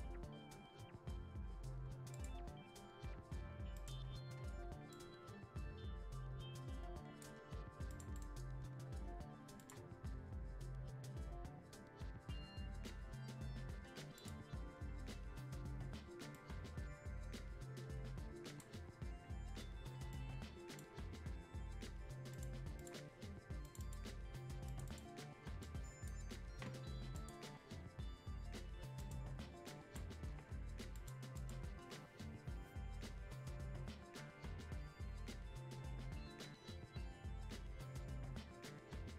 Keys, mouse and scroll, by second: 2.1-7.9 drag, 8.1 right click, 9.6 click, 14.1 click, 15.8-27.1 drag.